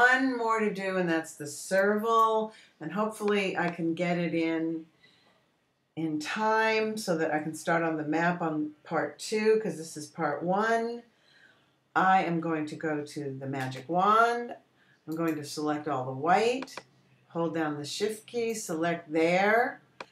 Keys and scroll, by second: 15.1 w.